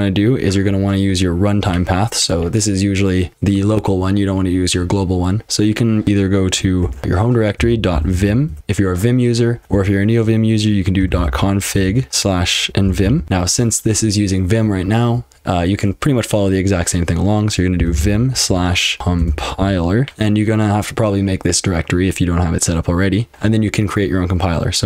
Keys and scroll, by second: 6.8-13.7 typing, 17.6-20.0 typing.